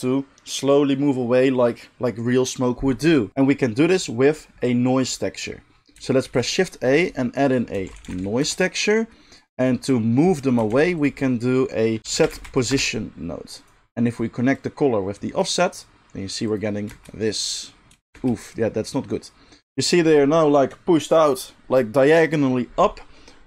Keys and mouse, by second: 3.4-14.5 middle drag, 6.2 shift+a, 10.7 shift+a, 14.5-23.4 drag, 16.9 space, 18.1 space.